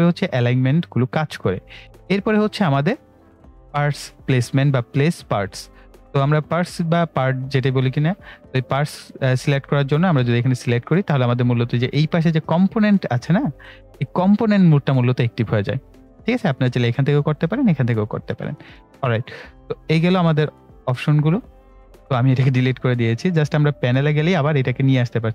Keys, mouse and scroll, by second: 10.2 click, 18.7 click, 23.8 click.